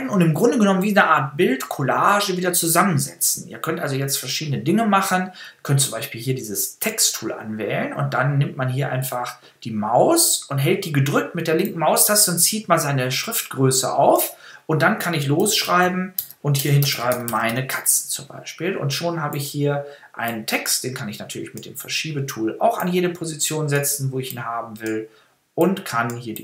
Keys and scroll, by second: 15.1-18.0 typing.